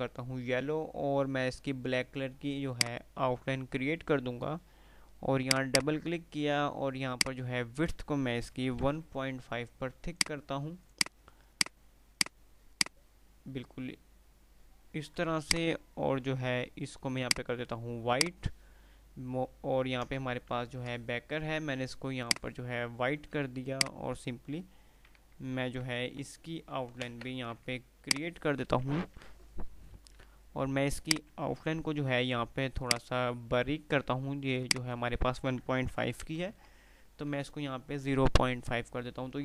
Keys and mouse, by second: 2.8 right click, 5.7 click, 10.2 click, 15.4 ctrl+click, 18.4 ctrl+click, 20.8 ctrl+q, 22.4 click, 23.8 ctrl+click, 24.7 F12, 27.0 Return, 28.1 ctrl+click, 29.0 ctrl+r, 29.4 F3, 30.7 F2, 31.1 click, 31.5 F2, 33.0 click, 37.7 F3.